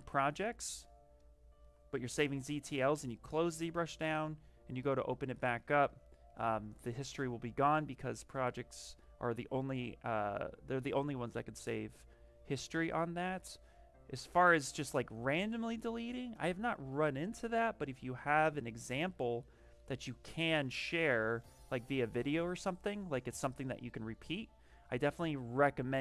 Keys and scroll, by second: 9.4 s, 22.3 s, 25.4 ctrl+z.